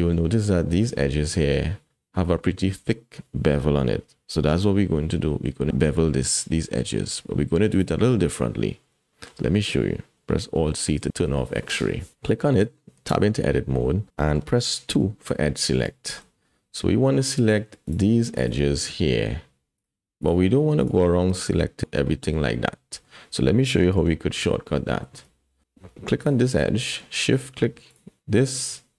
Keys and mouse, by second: 7.7 click, 8.8-9.3 drag, 11.0 alt+z, 13.1 Tab, 14.2 shift+click, 14.6 click, 15.0 2, 15.5 click, 16.0 shift+click, 17.1 click, 18.4 shift+click, 20.8 shift+click, 21.4 shift+click, 22.1 click, 22.7 click, 24.1 alt+a, 24.4 click, 25.1 shift+click, 25.4 shift+click, 26.2 click.